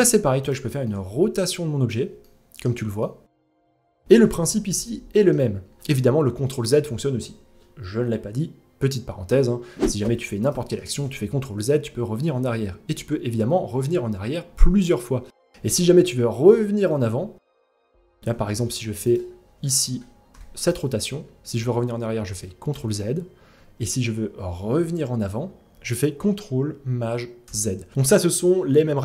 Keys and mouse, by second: 0.4-1.5 middle drag, 1.8-2.2 shift+middle drag, 2.6-3.4 middle drag, 3.7 r, 3.9 ctrl+z, 4.2-4.9 middle drag, 9.6 g, 18.0 g, 19.2 middle click, 19.8 r, 22.3 ctrl+z, 27.0 ctrl+shift+z.